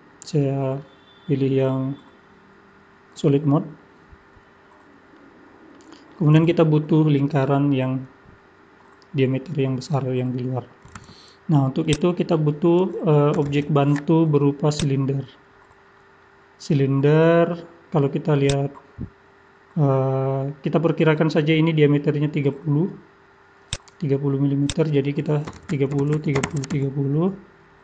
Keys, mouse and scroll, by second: 5.1 middle click, 11.8 click, 13.4 shift+a, 15.5-16.5 scroll down 18, 24.7 click.